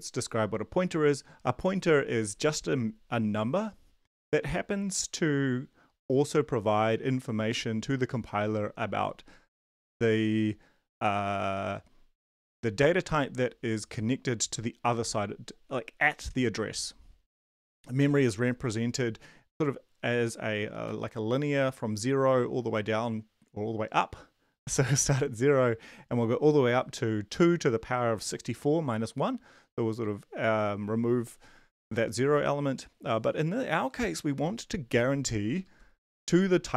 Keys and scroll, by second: 17.9 Left, 36.1 Right, 36.3 Right.